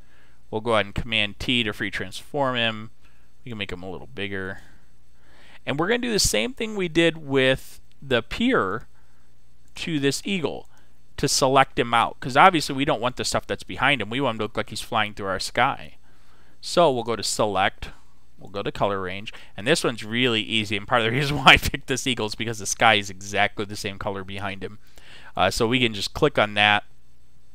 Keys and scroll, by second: 1.3 super+t.